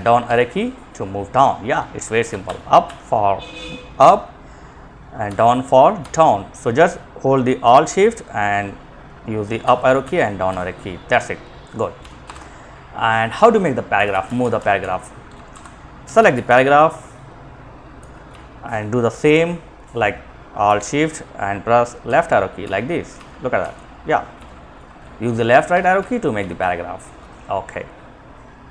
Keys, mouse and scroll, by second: 1.6 alt+Up, 2.0 alt+Up, 4.4 Down, 5.3 Down, 8.8 alt+shift+Up, 9.2 alt+shift+Up, 9.7 alt+shift+Down, 11.2 Left, 11.4 Return, 13.2 Up, 13.3 Up, 13.3 Up, 13.6 Up, 13.8 Up, 14.0 Up, 14.8 End, 15.2 Down, 15.3 Down, 15.5 Down, 17.2 Down, 17.5 Left, 21.3 alt+shift+Right, 21.8 alt+shift+Right, 22.3 alt+shift+Right.